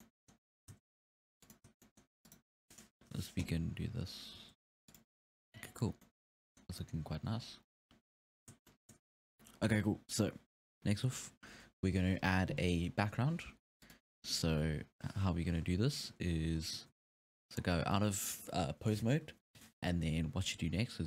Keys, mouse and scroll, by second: 0.0-0.6 middle drag, 0.6 r, 1.7 scroll down 1, 1.8-2.3 middle drag, 2.3-2.6 right drag, 3.0 KP_1, 3.7 e, 4.4 r, 5.6 scroll down 2, 5.8 scroll up 5, 6.0-6.6 middle drag, 6.6 scroll down 1, 6.8-16.5 middle drag, 7.4 scroll up 5, 7.6-8.7 scroll down 5, 16.5-16.9 scroll down 1, 16.9 ctrl+Tab, 17.6-18.6 scroll up 6, 19.0-19.4 scroll up 1.